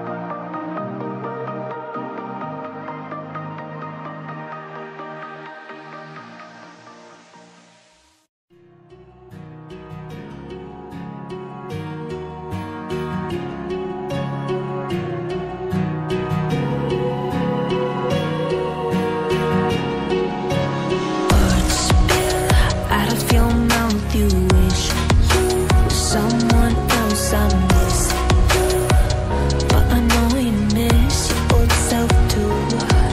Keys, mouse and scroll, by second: 0.3 click, 4.5 click, 7.5 shift+click, 11.1-12.1 typing, 12.2 click, 15.3 scroll down 1, 15.8 scroll up 1, 16.5 click, 19.8 click, 20.1-20.9 typing, 27.0-27.8 typing, 28.2 click, 29.4 ctrl+click, 29.6 ctrl+double click, 30.1 ctrl+a, 30.3 ctrl+a, 30.4-31.2 typing, 31.6 click.